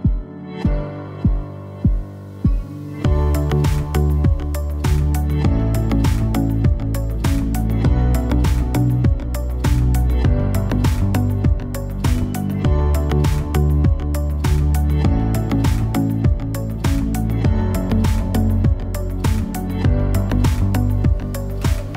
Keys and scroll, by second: 4.1 super+z.